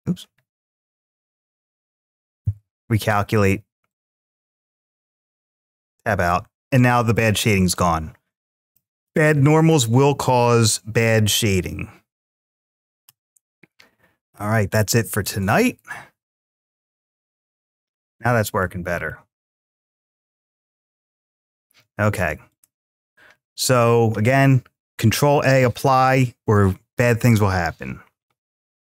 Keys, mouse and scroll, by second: 0.7 click, 1.4 click, 2.2 alt+n, 4.6 click, 5.6 Tab, 6.7-7.5 middle drag, 8.5-8.9 shift+middle drag, 12.3-14.0 scroll up 1, 14.0-15.5 drag, 15.3 scroll up 1, 16.9 click, 17.9-18.5 middle drag, 18.9-19.5 shift+middle drag, 19.8-20.3 scroll down 2, 20.0-20.3 scroll up 1, 20.3-21.6 middle drag, 22.3 click.